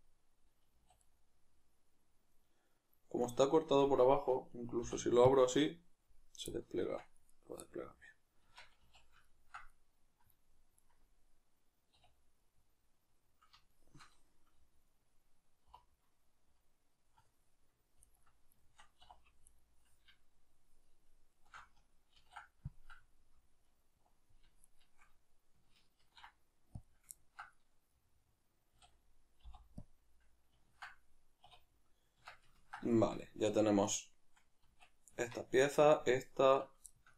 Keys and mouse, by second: 0.7 a, 4.8 u, 6.8 Tab, 7.3 right click, 8.4 Tab, 10.7 right click, 11.9 \, 12.5-18.0 middle drag, 15.7 3, 18.0 alt+right click, 18.6-19.5 shift+middle drag, 19.0 2, 19.5 alt+right drag, 21.4 alt+shift+right click, 22.2 ctrl+e, 23.6 alt+right click, 24.6-26.0 alt+shift+right drag, 26.0 ctrl+e, 27.2-33.9 ctrl+middle drag, 28.7 a, 31.4 \, 32.2 Tab, 33.9-34.6 right drag, 34.6 Tab, 35.7 right click, 36.5 right click, 36.9-37.1 shift+middle drag.